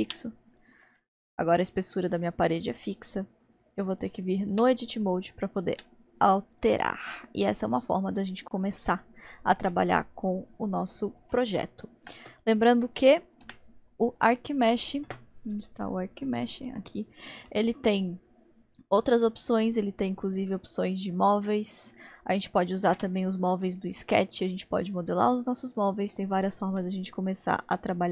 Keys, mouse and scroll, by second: 0.5 click, 1.0-1.5 middle drag, 1.5 click, 2.5-2.9 drag, 3.5-3.9 middle drag, 3.9 click, 4.5 Tab, 5.7 Tab, 6.5 click, 7.0-9.0 middle drag, 9.0-9.7 scroll up 1, 9.7-13.4 middle drag, 13.4 n, 16.2-17.4 drag, 17.5-20.5 middle drag, 20.5-22.9 drag, 23.6-28.1 middle drag.